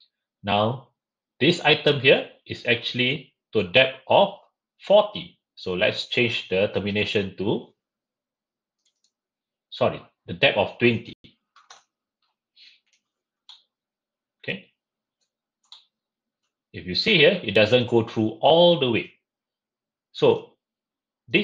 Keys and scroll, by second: 11.5 typing, 13.3 typing.